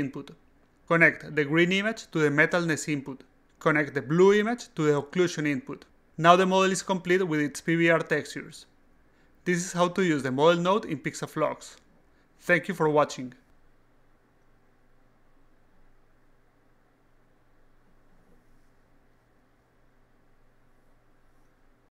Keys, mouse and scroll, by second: 2.0-3.3 drag, 4.4-5.4 drag, 7.0-7.6 alt+drag, 7.8-8.5 alt+middle drag, 8.9-10.5 alt+drag, 10.9-11.3 alt+drag, 12.0-12.5 alt+drag, 12.9-15.1 alt+drag, 17.1 click.